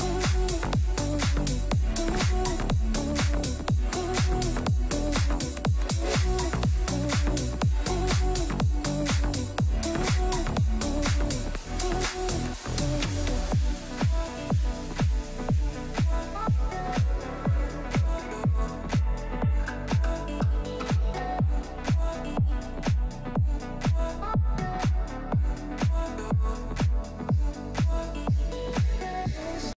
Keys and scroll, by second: 12.1 7, 12.7 Return, 19.4 1, 19.5 5, 19.9 Return, 21.8 c, 22.2 e, 22.5 Escape, 22.8 F3, 26.2 shift+F2, 27.3 F9, 29.7 F3.